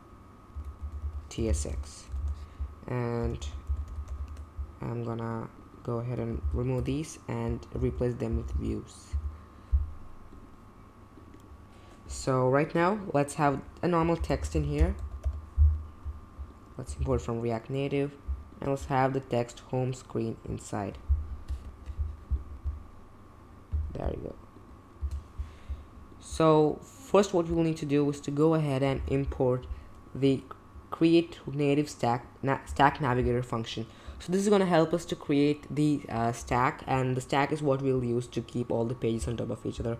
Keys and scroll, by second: 0.0-4.5 typing, 2.2 super+b, 6.4 super+d, 6.7 BackSpace, 7.7-9.1 typing, 13.9-15.7 typing, 16.9 shift+., 25.0 space, 29.7 space, 33.7 space.